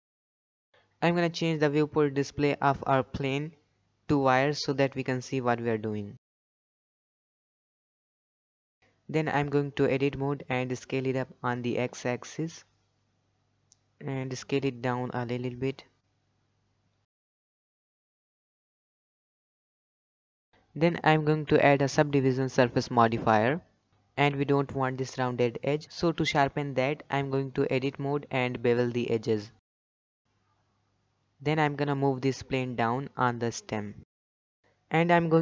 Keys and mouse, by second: 0.1 click, 2.1 click, 4.1 click, 5.8-6.4 drag, 6.7-7.0 middle drag, 7.8 middle click, 8.4 middle click, 8.8 s, 9.2 Tab, 9.6 a, 9.9 s, 11.3 middle click, 11.9 Tab, 12.1-13.5 middle drag, 13.6 Tab, 15.5 middle click, 16.2 s, 16.7 middle click, 17.3 g, 18.1-18.6 middle drag, 18.6 Tab, 18.7 middle drag, 19.3 click, 19.8-21.7 drag, 23.2-23.8 middle drag, 26.1 Tab, 26.9 alt+click, 28.6 ctrl+b, 30.6 middle click, 30.8 Tab, 31.1-31.4 shift+middle drag, 32.0 shift+middle drag, 32.6 middle click, 32.9 g, 34.9 middle drag.